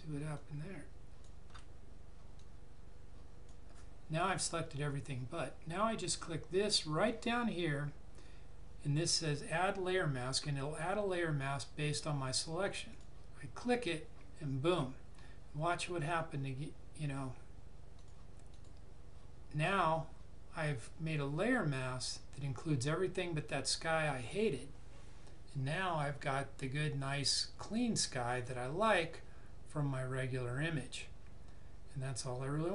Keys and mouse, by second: 12.8 click, 17.9 click.